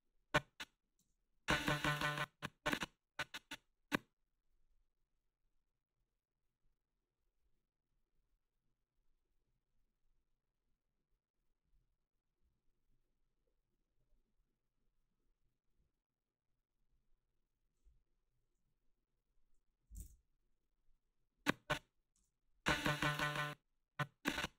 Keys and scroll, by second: 1.0 space, 1.9 space, 19.7-20.5 typing, 22.2 space.